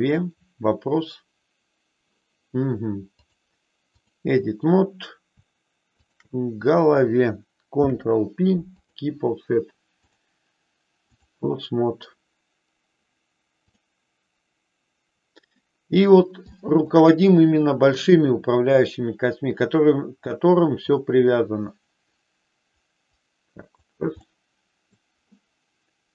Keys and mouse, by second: 3.2-4.2 drag, 5.9 shift+click, 7.8 ctrl+p, 9.9-11.3 drag, 16.4 shift+middle click, 18.0-23.8 drag, 24.2 middle click.